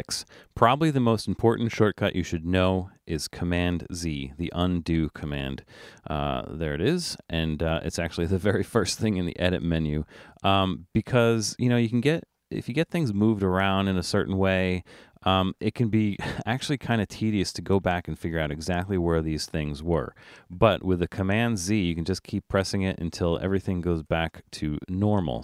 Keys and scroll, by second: 21.2 super+z, 21.9 super+z, 22.3 super+z, 22.9 super+z, 23.5 super+z, 24.2 super+z.